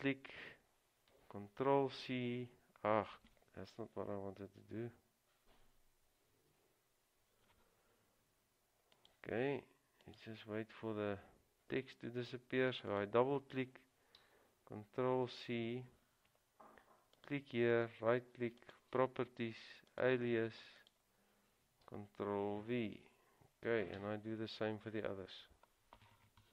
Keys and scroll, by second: 1.9 c, 6.4 ctrl+z, 15.2 ctrl+c, 23.0 ctrl+v, 24.2 Return.